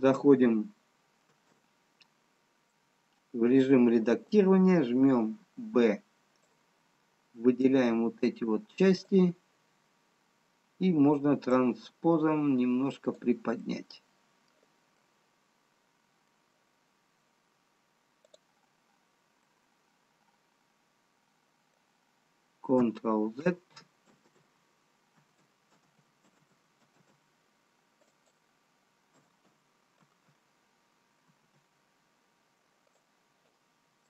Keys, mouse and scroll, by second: 1.3 Tab, 3.3 middle click, 5.6 b, 11.7 click, 14.4 middle click, 15.8 middle click, 18.7 click, 19.8 middle click, 25.6 ctrl+a, 29.7 ctrl+z, 30.6 ctrl+z, 33.1 ctrl+z, 33.1 click.